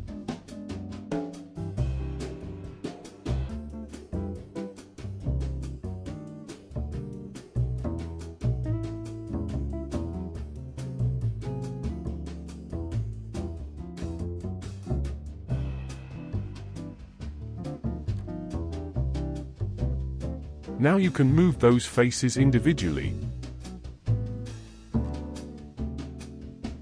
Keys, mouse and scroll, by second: 1.0 click, 1.9-3.0 drag, 3.8-5.9 middle drag, 5.9 click, 6.9-8.2 drag, 10.4 click, 11.2-13.2 drag, 13.2 Tab, 14.0-14.7 shift+middle drag, 14.7 click, 15.6 click, 16.6-17.5 shift+middle drag, 17.5 Tab, 18.3 click, 19.0-22.1 middle drag, 22.3 ctrl+Tab, 25.8-26.8 middle drag.